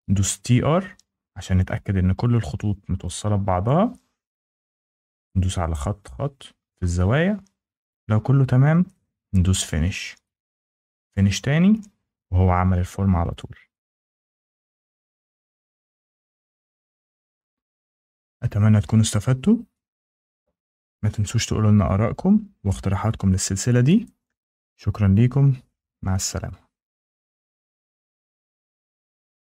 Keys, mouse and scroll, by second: 0.2 typing, 1.5 click, 2.2 click, 2.9 click, 3.5 click, 4.4 click, 5.1 click, 7.9 Escape, 9.5 click, 11.0 click, 12.2 middle click, 13.0 scroll, 13.3 click, 13.9 scroll, 15.0 shift+middle click, 17.8 shift+middle click.